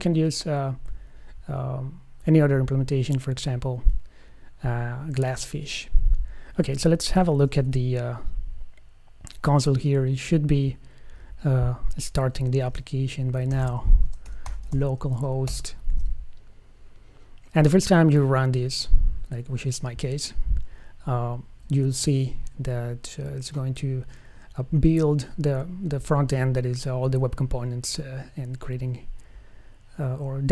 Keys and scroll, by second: 8.4 c.